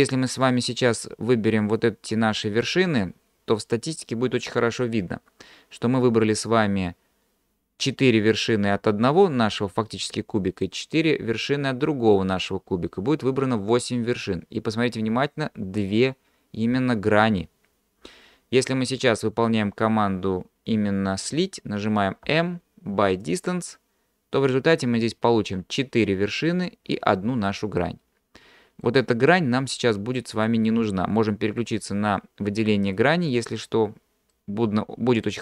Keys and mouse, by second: 0.4 click, 1.0-2.6 drag, 22.3 m, 27.9 middle click, 30.4 click, 33.3 middle click, 34.4 middle click.